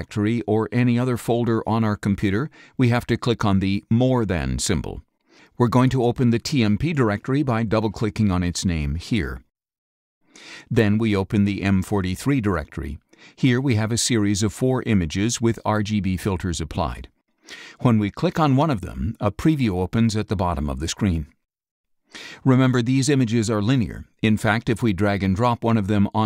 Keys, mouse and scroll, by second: 3.9 click, 7.1 click, 9.2 click, 11.4 click, 17.9 click, 24.4-26.1 drag.